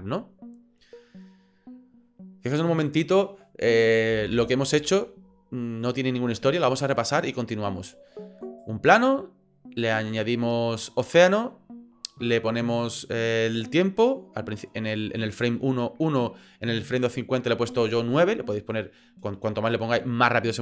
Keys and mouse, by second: 4.1 space, 5.8 click, 8.4 right click.